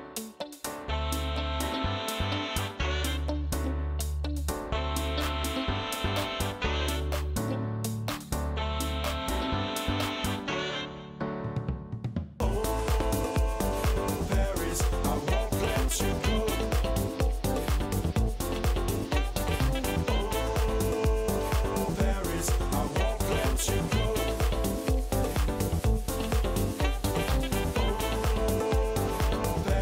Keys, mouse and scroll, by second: 0.1 right click, 1.0 right click, 1.2 Down, 1.5 Right, 1.6 right click, 3.0 Right, 3.5 right click, 3.7 Down, 5.1 click, 5.7-7.3 typing, 6.2 click, 8.7 click, 9.4 click, 10.1 click, 11.9 click, 12.3 typing, 12.7-15.0 drag, 16.1 click, 16.6 click, 20.7 click, 23.3-26.5 drag, 26.5 scroll, 26.6-28.3 drag, 28.4-29.8 drag.